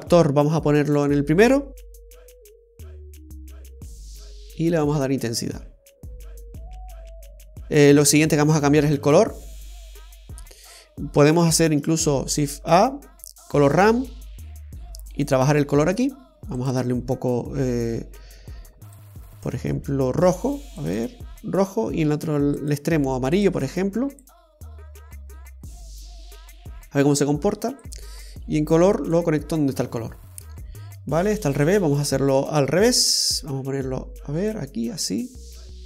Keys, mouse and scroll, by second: 0.1 click, 4.3 click, 12.0 shift+a, 16.8 click, 22.7 click, 23.5 click, 27.9 click, 30.7 scroll up 2, 31.5 scroll down 2, 33.0 click, 35.2 click.